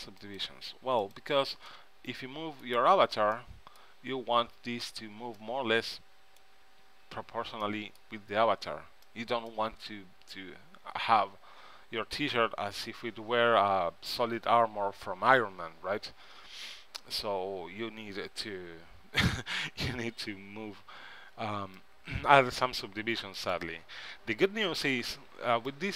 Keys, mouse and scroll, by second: 1.8 middle click, 7.7-10.4 middle drag, 10.9 middle click, 13.1 KP_3, 20.0 c, 25.3 b.